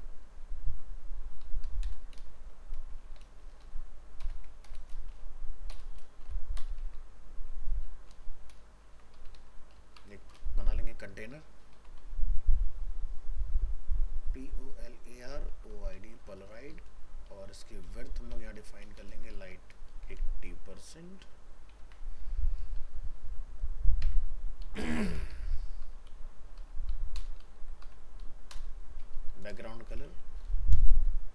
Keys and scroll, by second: 6.8 ctrl+s, 21.8 ctrl+s.